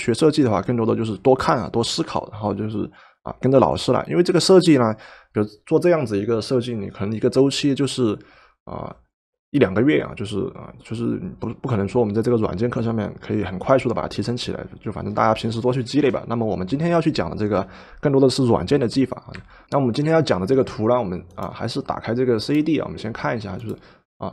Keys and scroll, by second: 19.5 Escape.